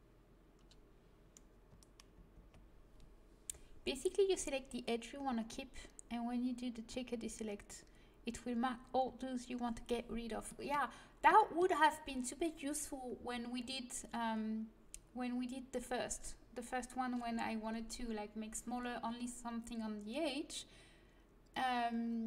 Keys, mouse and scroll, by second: 0.0 click, 2.1 shift+l, 10.1-13.6 middle drag.